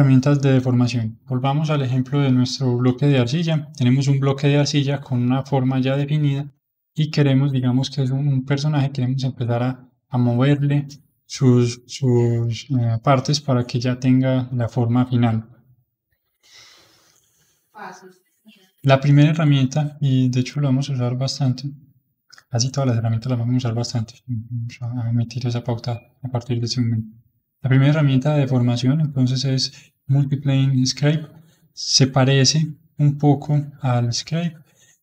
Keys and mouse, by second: 19.4-22.5 drag, 26.3-31.9 middle drag, 32.6-35.0 drag.